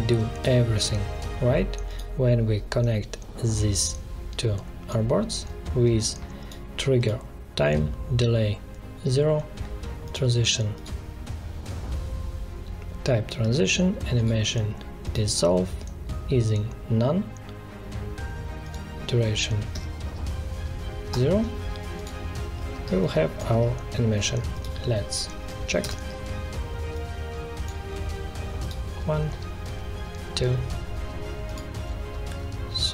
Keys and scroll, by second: 19.7 0, 21.1 Return, 22.8 space, 25.8 ctrl+Return.